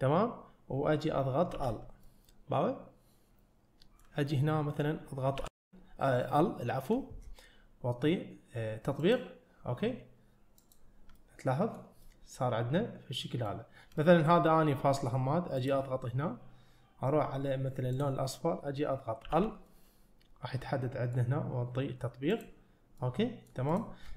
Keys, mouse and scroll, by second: 1.6 l, 2.1-4.0 middle drag, 5.4 l, 9.1 click, 10.7 click, 11.2 middle click, 12.1-13.5 middle drag, 14.0 middle click, 15.6 click, 18.0 click, 19.3 l, 19.7-21.2 middle drag, 22.4 click, 23.0 middle click, 23.8-24.1 drag.